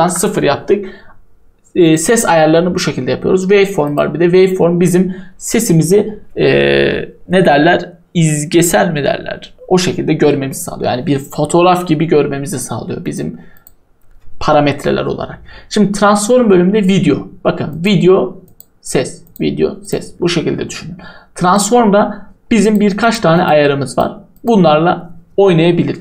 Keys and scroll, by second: 0.0 Return.